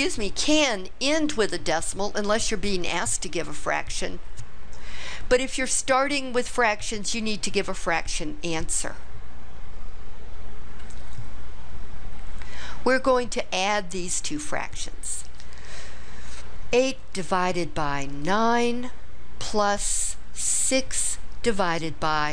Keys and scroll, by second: 15.8 8, 18.3 9, 20.8 6.